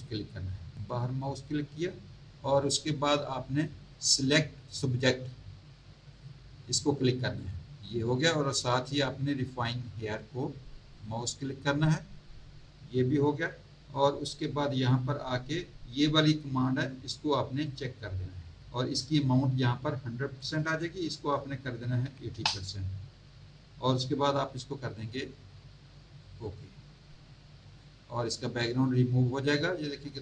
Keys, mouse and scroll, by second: 0.7 click, 6.1 click, 10.9 click, 13.4-14.3 scroll down 2, 14.6 scroll down 1, 17.6 click, 20.3 click, 22.0 KP_8, 22.3 KP_0, 26.1 click.